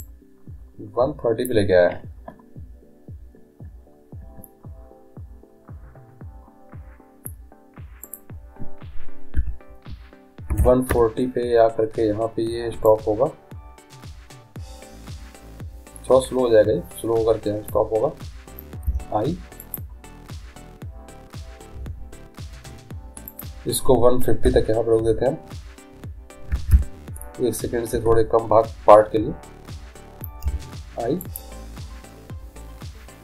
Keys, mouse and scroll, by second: 0.1-1.8 drag, 8.1-9.8 drag, 10.0 click, 12.9-17.8 drag, 18.9 i, 23.4-25.3 drag, 30.5 i.